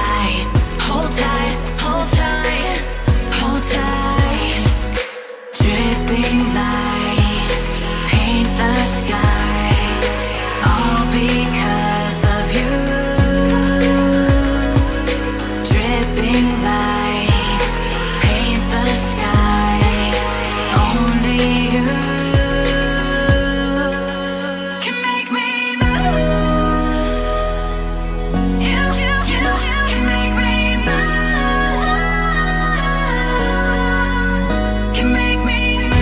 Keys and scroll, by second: 20.2 ctrl+u, 24.1 ctrl+z, 25.5 ctrl+d.